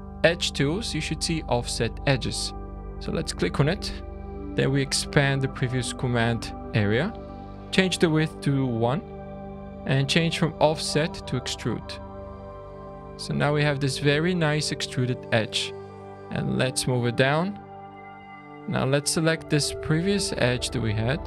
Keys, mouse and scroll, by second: 0.1 click, 5.1 typing, 11.9 scroll, 12.5 scroll, 12.7 scroll down 1, 13.1 shift+middle click, 15.8 click, 16.1 scroll up 1, 17.7-19.2 typing, 18.3 alt+click, 20.1 alt+shift+click.